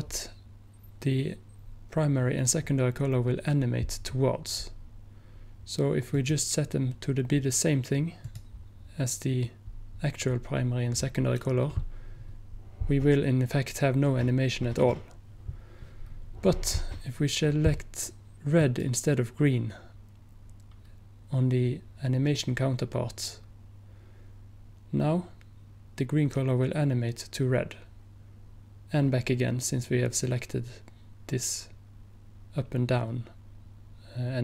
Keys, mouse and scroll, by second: 8.4 click, 18.7-20.8 drag.